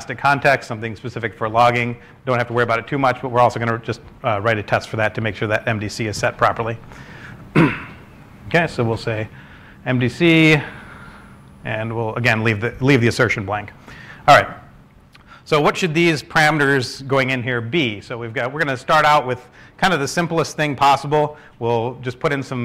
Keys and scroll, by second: 8.2-9.1 typing, 10.8-11.4 typing, 16.2-22.4 typing, 18.5 Return.